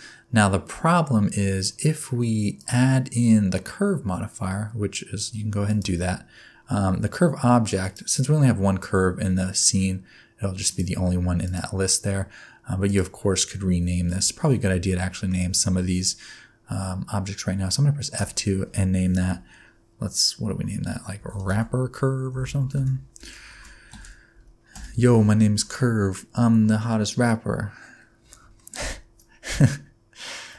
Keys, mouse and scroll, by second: 2.6 click, 7.8 click, 12.9 click, 14.9 shift+middle click, 18.2 F2, 22.4 p, 28.6 shift+middle click, 30.2 shift+middle click.